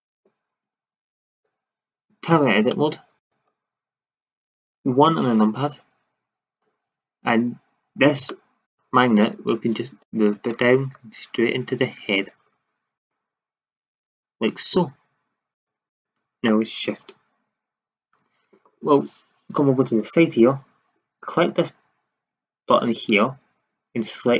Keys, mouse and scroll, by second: 0.9 shift+z, 2.4 Tab, 4.8 KP_1, 10.0-11.6 middle drag, 15.5-15.9 drag, 22.9-24.3 drag.